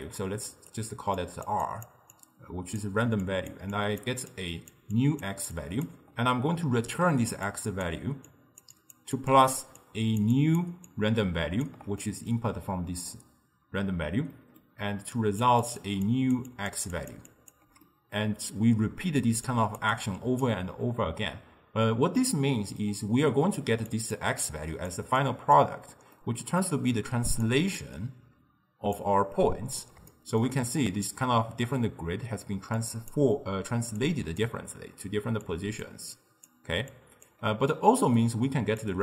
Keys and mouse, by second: 0.0-11.8 typing, 1.2 click, 1.7 click, 2.2-2.8 drag, 3.3 click, 3.8 click, 4.4 click, 5.0 click, 5.6 click, 7.1 click, 8.4 click, 8.8 click, 9.3 click, 9.8 click, 10.4 click, 11.0 click, 12.1-13.9 middle drag, 13.9-17.8 typing, 14.3-14.9 middle drag, 15.2 click, 15.7 click, 16.1 click, 16.6 click, 17.0 click, 17.3 click, 17.9-19.4 middle drag, 19.4 d, 19.5 click, 19.9 d, 20.0 click, 20.5 d, 22.2-23.6 middle drag, 23.6-26.0 typing, 23.9 drag, 24.5-25.0 drag, 25.3 click, 26.3-27.5 middle drag, 27.5 click, 30.2-32.7 shift+middle drag, 32.7-37.5 typing, 32.8 click, 34.1-34.5 drag, 35.5-35.9 drag, 36.2 click, 37.0 click, 37.8 middle click, 38.7 d, 38.9 click.